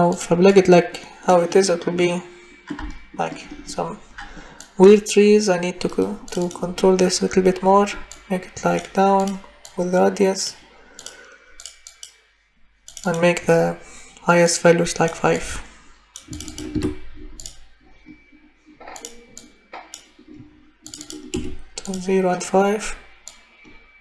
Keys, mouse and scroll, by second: 8.2 click, 10.9 click, 11.6 click, 16.4 click, 16.7 5, 17.6 click, 21.3 0, 23.4 click.